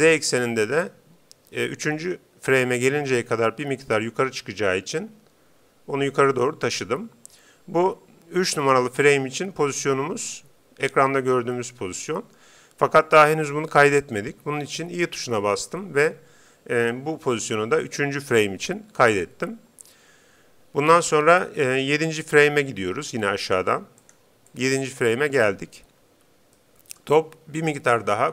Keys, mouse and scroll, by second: 3.4 g, 6.4-8.1 drag, 15.3 i, 23.4-26.5 drag, 26.7-28.1 middle drag.